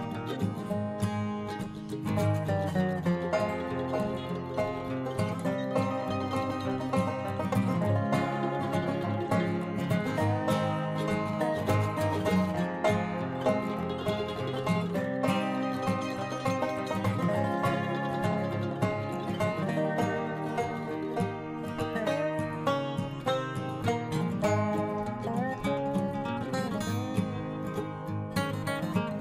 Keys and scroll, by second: 1.9 ctrl+t.